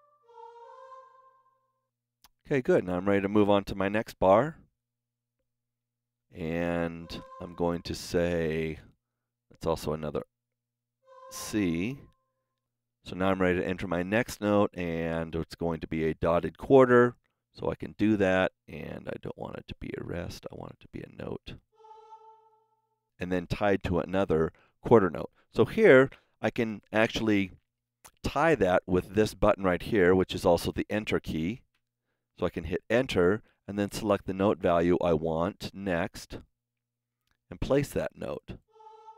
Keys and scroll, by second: 0.1 Right, 0.4 Up, 4.6 Right, 6.8 Left, 10.9 r, 16.0 KP_4, 16.4 KP_Decimal, 31.7 KP_Enter.